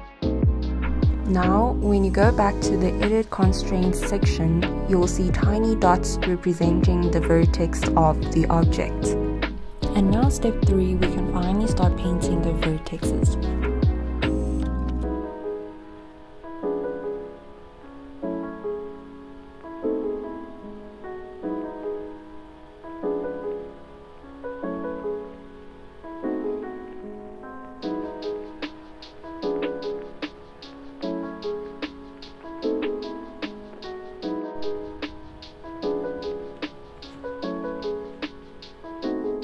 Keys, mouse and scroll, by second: 0.4 f, 1.2 scroll up 1, 2.3 click, 4.5 click, 6.7-7.6 scroll up 1, 7.7 alt+middle click, 8.0 alt+scroll up 1, 9.5 scroll down 1, 10.2-12.6 alt+drag, 12.6 alt+scroll down 1, 14.1 alt+middle click, 14.7-15.0 alt+scroll up 1, 17.4-21.3 drag, 22.9 scroll down 1, 23.8-27.3 drag, 31.1-32.4 scroll up 1, 34.3-34.7 scroll down 1, 35.9 click, 37.0 scroll up 1, 37.3-39.4 alt+drag.